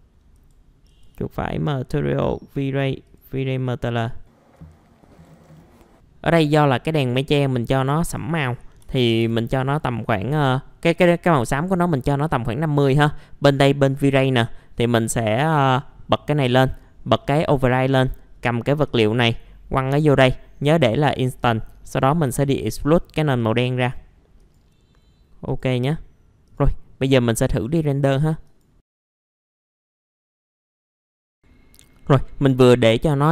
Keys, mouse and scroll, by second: 0.3 right click, 0.8 click, 5.1-6.1 typing, 5.8 click, 8.8 KP_5, 9.0 KP_0, 9.6-27.5 drag, 27.6 right click, 28.4 click, 29.2 scroll up 1.